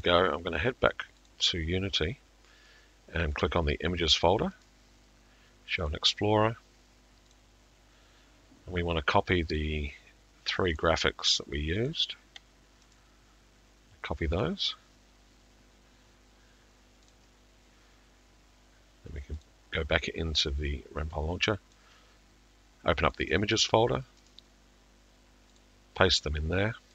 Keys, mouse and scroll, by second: 0.0 click, 1.3 click, 3.4 click, 4.7 click, 5.9 right click, 7.4 click, 9.6 click, 11.9 ctrl+click, 13.0 right click, 14.4 click, 19.4 click, 21.8 click, 23.1 click, 24.3 click, 25.6 click.